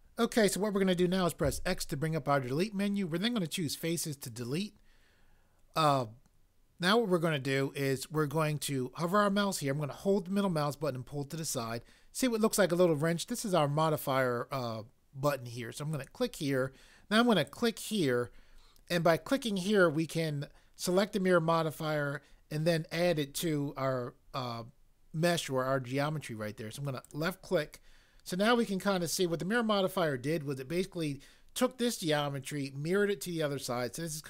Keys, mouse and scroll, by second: 1.4 x, 16.1 click, 17.6 click.